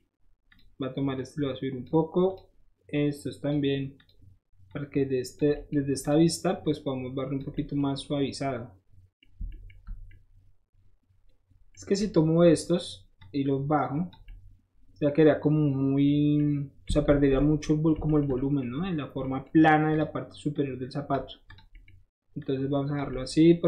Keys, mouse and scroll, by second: 0.4 click, 0.5 middle click, 1.1 click, 1.8 middle click, 2.2 click, 2.3 middle click, 2.9 click, 3.4 middle click, 3.9 click, 4.0 middle click, 4.7 click, 5.3 middle click, 6.0 click, 6.6 click, 7.5 middle click, 8.2 middle click, 9.6-11.7 shift+middle drag, 11.9 shift+click, 13.1 click, 14.2-16.0 middle drag, 16.3 middle click, 17.0 ctrl+z, 17.4 middle click, 17.9 ctrl+shift+z, 19.8 click, 20.5 click, 21.4 click, 21.7 middle click, 22.3 click, 23.1 middle click.